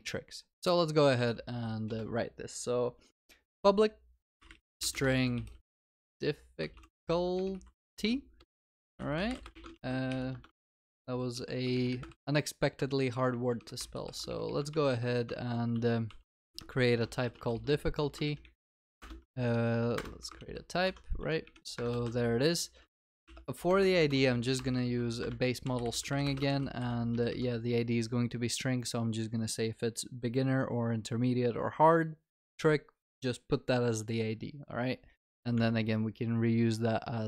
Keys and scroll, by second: 1.9 Return, 9.8 ctrl+s, 10.7 ctrl+v, 11.3 ctrl+z, 12.1 ctrl+v, 14.7 ctrl+v, 16.0 ctrl+v, 19.0 alt+Return, 20.4 ctrl+s, 24.8 Escape, 25.2 Return, 26.6 ctrl+s, 35.3 Tab.